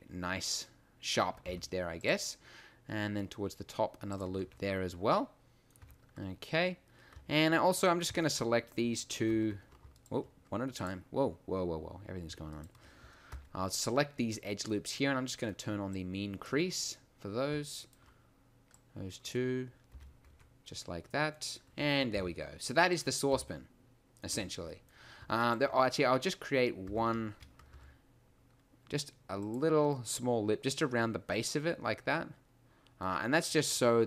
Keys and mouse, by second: 1.5 ctrl+r, 4.4 Tab, 5.8 Tab, 13.3 n, 19.9 n, 20.4 Tab, 22.1 t, 23.4 t, 24.3 Tab, 27.2 e, 27.7 s, 29.5 click, 31.2 middle click, 31.7 middle click, 32.0 middle click.